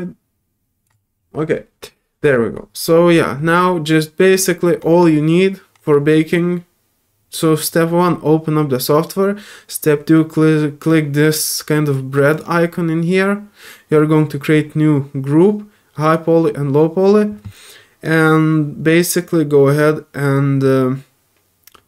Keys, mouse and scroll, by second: 12.3 click.